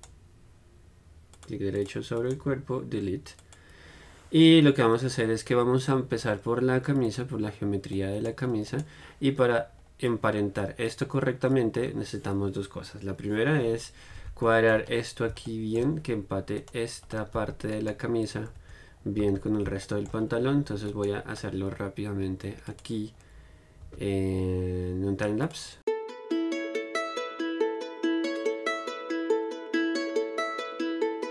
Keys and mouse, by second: 0.1-1.6 middle drag, 1.6 right click, 2.0 click, 2.4-6.1 middle drag, 7.3 click, 8.2-10.0 right drag, 10.0-17.4 middle drag, 17.4-19.5 right drag, 17.9 z, 18.9 Tab, 19.5 z, 21.6 right click, 21.9 middle click, 23.6-25.7 drag, 25.9-31.3 typing, 26.9 click, 27.2 right click, 27.8 right click, 28.1 click, 28.5 right click, 29.5 click, 29.7 click, 30.0 right click, 30.1 click, 30.5 click, 30.6 right click, 31.0 click.